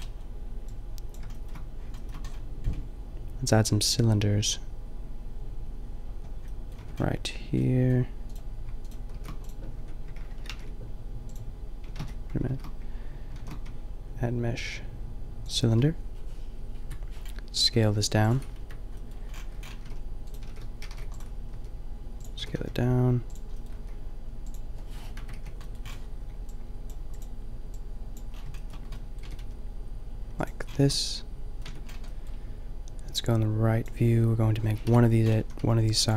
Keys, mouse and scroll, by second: 0.7 click, 5.6 middle drag, 6.8 Tab, 8.3-9.4 drag, 9.2 shift+s, 9.8 Tab, 10.5 ctrl+alt+shift+c, 12.0 ctrl+z, 12.5 shift+s, 13.4 shift+a, 16.9 KP_Decimal, 17.6 s, 18.3 click, 18.6 KP_Decimal, 19.7-21.7 drag, 19.9 r, 20.4 r, 21.5 s, 22.3 s, 23.8 s, 25.3 KP_Decimal, 25.4 KP_5, 29.2 g, 30.4 click, 31.7 Tab, 34.9-36.1 typing.